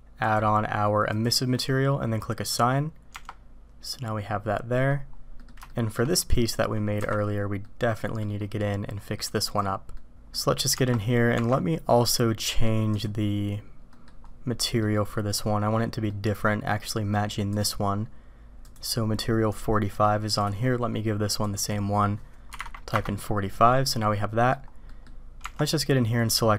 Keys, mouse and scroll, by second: 0.2-1.5 drag, 2.4 click, 3.1 Tab, 5.4 click, 5.7-6.0 shift+drag, 6.3 click, 7.0 KP_Decimal, 7.6-8.2 drag, 8.9 click, 9.4 click, 9.9 click, 10.7 Tab, 11.3 Tab, 12.4 click, 12.9 click, 13.9 click, 14.6 middle click, 16.1-16.7 drag, 18.6 click, 19.9 click, 20.4 click, 21.4-23.1 drag, 23.8-24.5 drag, 24.9 click, 25.4 Tab.